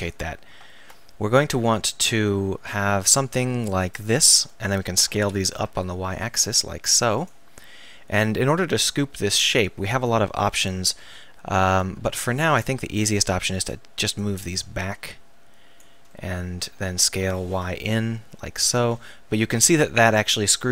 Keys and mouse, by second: 0.0 click, 0.7 ctrl+r, 5.2 s, 7.3-8.5 drag, 9.9-15.8 middle drag, 15.8 click, 16.8 s, 17.5-18.7 middle drag, 18.8 click.